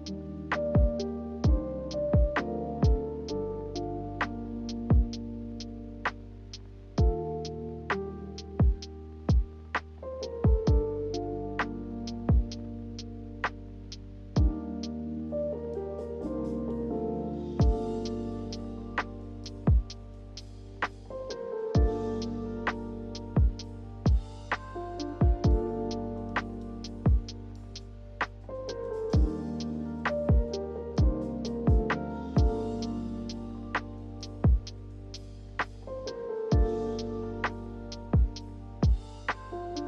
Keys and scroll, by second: 20.4 v, 23.0 v, 26.1 d, 30.3 z, 33.6 v.